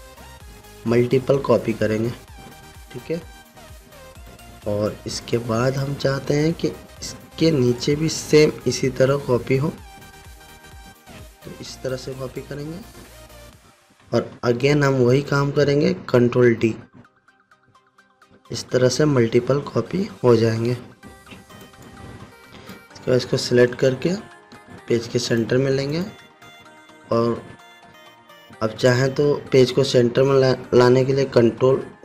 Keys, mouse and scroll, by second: 3.7 ctrl+d, 4.2-4.6 alt+scroll down 1, 4.7 click, 5.1 alt+scroll down 1, 5.7-6.4 click, 6.8-7.2 alt+scroll up 1, 8.7-12.4 alt+shift+drag, 14.7-15.7 alt+scroll down 2, 16.9 ctrl+d, 18.7 ctrl+d, 21.3-22.0 scroll down 1, 22.1-23.3 drag, 24.5 ctrl+g, 25.8 click.